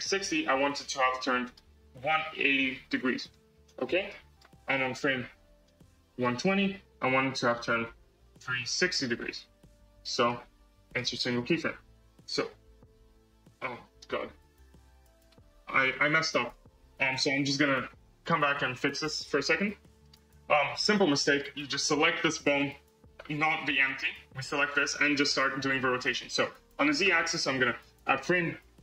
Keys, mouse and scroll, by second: 0.0-3.3 drag, 3.9-5.5 right drag, 5.5-9.7 drag, 10.1-11.4 right drag, 11.4 space, 16.3 space, 23.7 click, 24.3 click, 27.9-28.8 right drag.